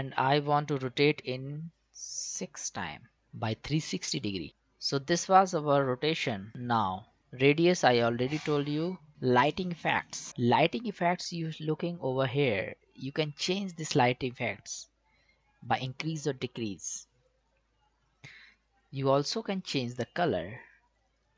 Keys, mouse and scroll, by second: 1.1 click, 6.5 click, 9.3 click, 14.0-21.3 drag.